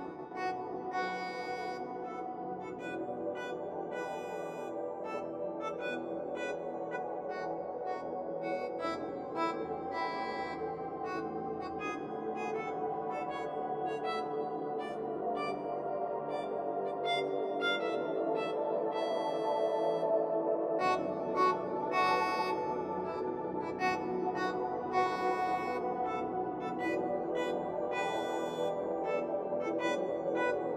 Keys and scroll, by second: 14.2 ctrl+j.